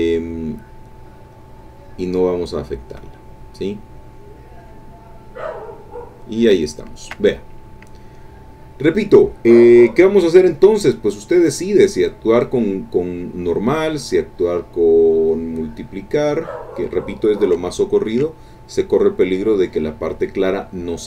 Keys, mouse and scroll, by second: 6.6 ctrl+click, 7.3 ctrl+click, 7.8 ctrl+click, 11.4 click, 16.2 click, 17.7 ctrl+click, 20.0 click.